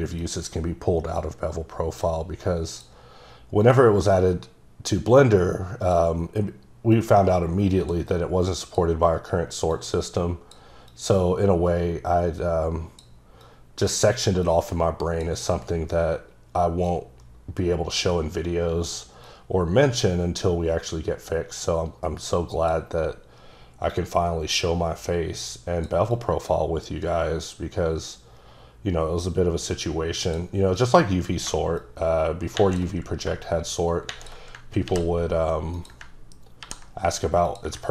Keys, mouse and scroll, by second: 0.2 click, 1.2 click, 2.7 click, 3.6 click, 6.9 click, 8.6 click, 9.7 click, 10.9 click, 13.4 click, 14.4 click, 16.9 click, 19.3 click, 23.9 click, 26.4 click, 30.8 click, 31.8 click, 33.4 shift+click, 34.8 ctrl+c, 35.7 click, 36.6 ctrl+v, 37.5 click.